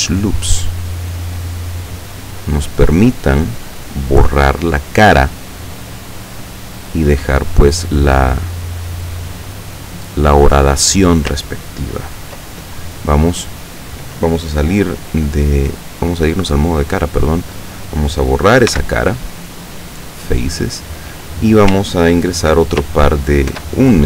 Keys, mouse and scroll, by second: 0.0-2.2 drag, 2.8 click, 5.7 right click, 6.2 click, 7.9 right click, 8.4-10.3 drag, 16.2 click, 17.4 right click, 18.8 x, 19.9 click, 23.6 ctrl+e.